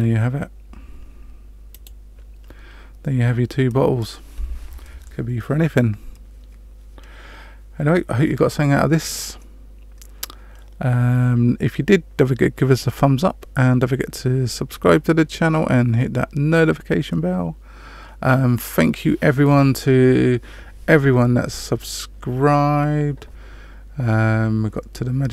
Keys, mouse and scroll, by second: 1.7 click.